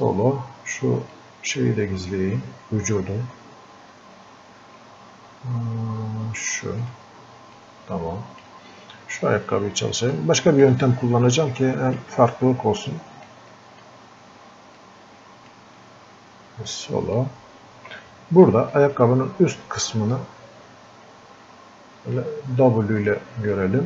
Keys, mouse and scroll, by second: 1.5 click, 6.8-9.1 drag, 9.1-9.6 scroll down 1, 10.1-11.6 drag, 11.6 click, 12.8-18.8 drag, 18.8-20.1 drag, 20.1-23.1 drag.